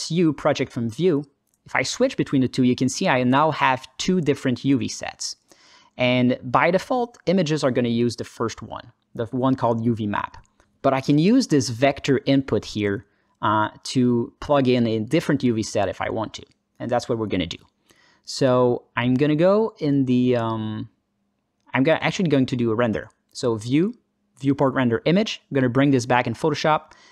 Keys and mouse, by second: 1.9 click, 2.4 click, 2.8 click, 3.1 click, 5.1 Tab, 5.9 alt+middle click, 6.5 click, 8.0 click, 12.1 alt+middle click, 13.0-13.6 drag, 13.9 alt+middle click, 19.8 click, 21.8 alt+shift+z, 23.4-25.8 drag.